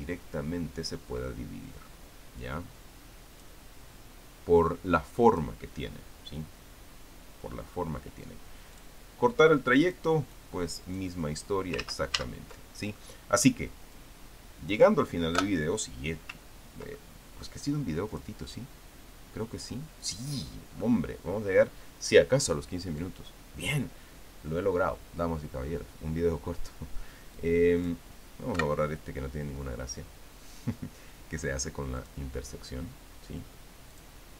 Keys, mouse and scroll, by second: 3.2-4.4 drag, 6.1 click, 9.6 click, 10.7-12.4 drag, 12.6 ctrl+z, 13.8 click, 14.9 click, 16.2 Delete, 17.3-17.8 ctrl+scroll down 2, 17.8 ctrl+middle click, 18.9 click, 20.8 click, 28.1 click, 29.3 Delete, 32.8 click.